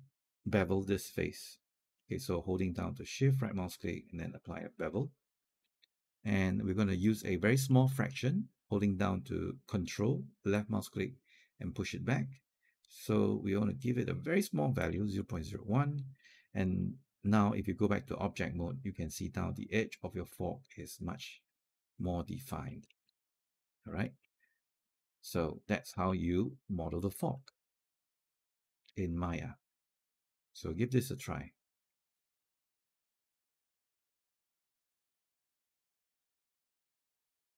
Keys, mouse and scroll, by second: 3.0 shift+right click, 3.5-5.3 shift+right drag, 5.4 alt+click, 10.3-14.6 ctrl+drag, 15.8 click, 16.1 scroll down 1, 16.4 alt+click, 17.3 right click, 18.4 click, 18.9-22.5 alt+drag, 22.7 scroll down 1, 22.9 alt+middle click, 23.5 alt+click, 23.9 alt+middle click, 24.1 alt+click, 24.7 alt+middle click, 25.1 alt+click, 25.9 alt+middle click, 27.9 alt+5, 29.1-32.6 alt+drag.